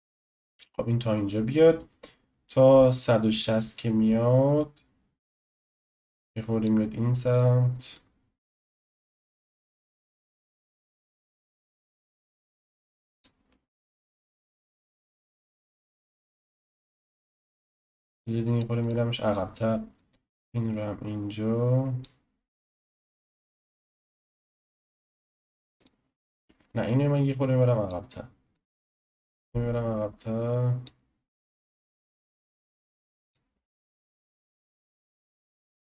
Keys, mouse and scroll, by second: 5.5-7.4 drag, 7.4-8.8 shift+middle drag, 8.8 click, 15.2 click, 16.5 click, 18.8 click, 19.9 click, 25.8-27.2 drag, 30.5 click, 31.8 click, 34.1 click.